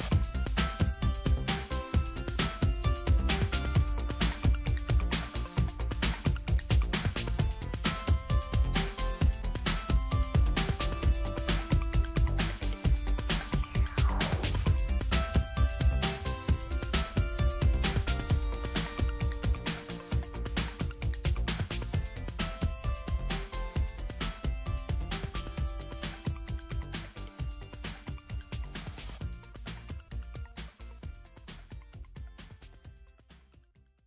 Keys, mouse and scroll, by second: 1.8 click, 2.8 click, 7.1 right click, 8.9 click, 10.9 click, 12.2 click, 15.3 click, 20.6 click, 22.1 click, 25.3 click.